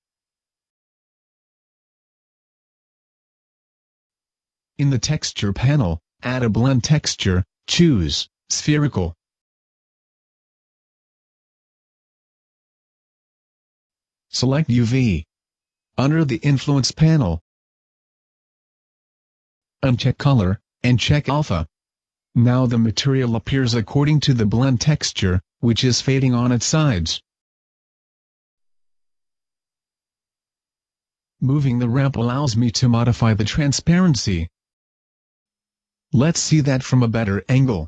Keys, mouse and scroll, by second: 3.8 click, 3.8-6.5 scroll up 3, 10.1 click.